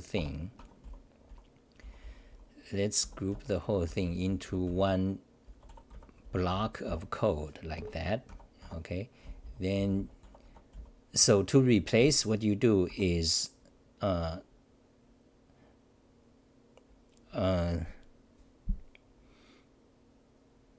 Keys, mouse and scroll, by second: 0.6 Home, 0.8-7.3 typing, 7.7 ctrl+g, 8.6 Tab, 9.0-11.2 typing, 12.6-13.4 typing.